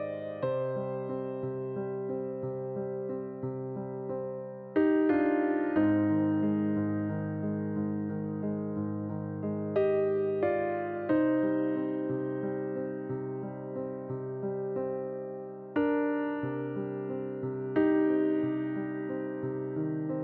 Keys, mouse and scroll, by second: 2.2-7.0 drag, 11.3-20.2 drag.